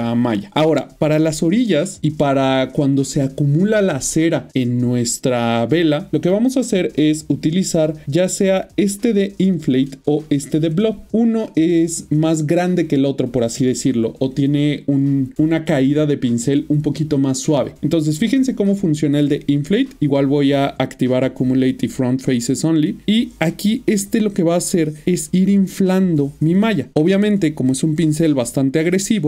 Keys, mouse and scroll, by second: 7.5 click, 19.1 click, 21.2 click, 21.7 double click, 22.6 middle click, 23.1 click, 25.2 middle click, 25.7 click, 26.1 double click, 26.9 middle click.